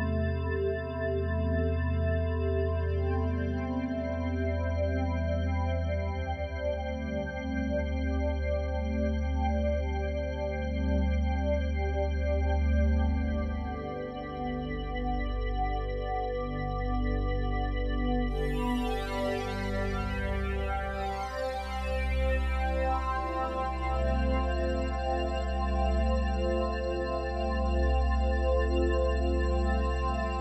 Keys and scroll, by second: 18.5 ctrl+t.